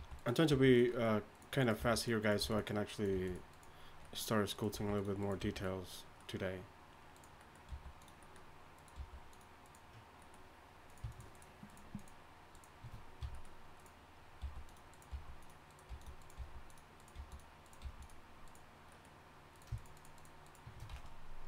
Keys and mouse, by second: 0.0-0.5 typing, 1.8 g, 2.4 g, 3.1 g, 4.7 g, 5.4 g, 7.7 g, 8.9 g, 13.2 f, 14.4-17.8 typing, 19.8 shift+right click, 20.9 x.